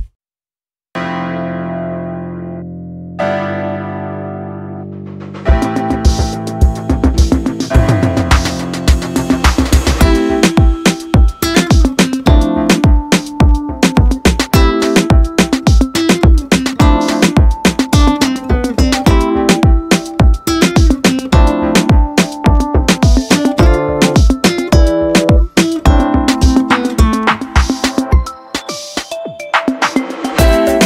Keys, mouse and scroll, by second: 4.1 click, 11.5-15.2 drag.